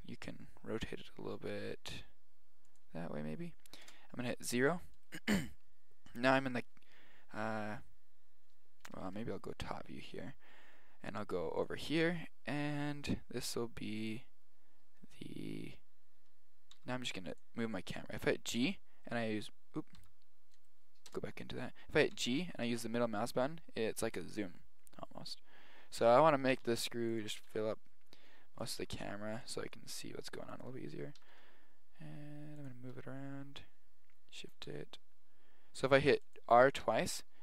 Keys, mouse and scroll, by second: 0.7 click, 1.1 click, 3.9 KP_0, 5.0-7.4 right drag, 7.4 z, 8.9 KP_1, 9.2 KP_7, 9.9-11.6 middle drag, 11.6 click, 16.8 g, 19.1 click, 19.6 middle click, 20.0 g, 20.3 click, 21.1 click, 21.3 KP_0, 22.2 g, 26.7 g, 27.5 g, 28.8 g, 29.6 g, 31.2 r, 33.0 r, 34.7 g, 36.9 r.